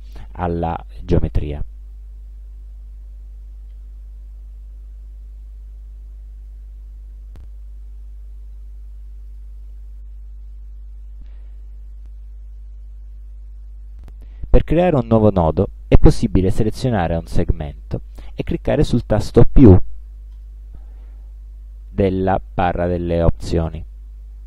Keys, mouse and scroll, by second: 2.0-6.8 drag, 9.4 click, 12.3 click, 13.9 click, 14.8 click, 16.9 click, 20.5 click.